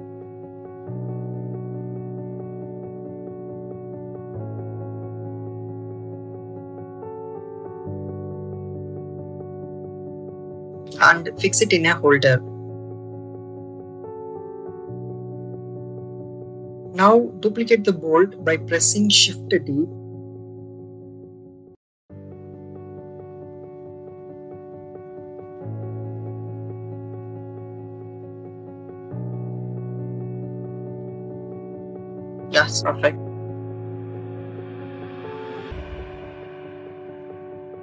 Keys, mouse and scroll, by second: 1.7 click, 4.0 shift+middle click, 5.2 middle click, 6.2 middle click, 7.0 shift+middle click, 8.4 click, 9.4 click, 10.5 click, 12.1 click, 12.6 click, 13.5 click, 15.8 click, 16.8 shift+d, 17.5-20.7 drag, 21.5 click, 23.2-24.3 drag, 24.8 a, 25.7-27.2 drag, 27.9 click, 29.7 middle click, 30.6 middle click, 31.5-33.6 drag, 34.1 click, 35.8-37.3 drag.